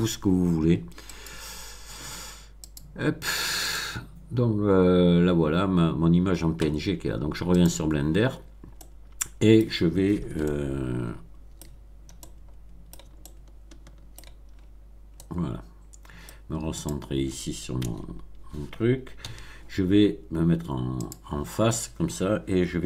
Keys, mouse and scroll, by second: 1.0 click, 2.6 click, 3.6 click, 7.6 click, 8.7-9.7 middle drag, 10.4-11.6 shift+middle drag, 11.6-11.9 shift+scroll down 2, 12.1-13.1 middle drag, 13.1-14.3 shift+middle drag, 14.5-14.8 shift+scroll up 1, 15.1-16.4 middle drag, 16.7 click, 17.7 Tab, 19.2 a, 21.0 click.